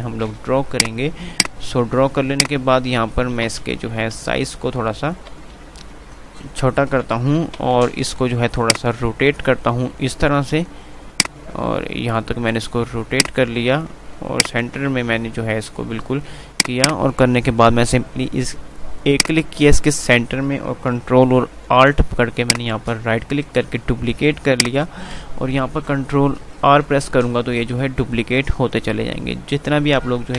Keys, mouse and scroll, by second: 3.6 ctrl+r, 7.6 ctrl+r, 8.6-11.0 drag, 9.3 click, 11.3 click, 15.0 c, 16.3 click, 19.8-24.6 drag, 24.6 alt+shift+right click, 27.0 ctrl+r.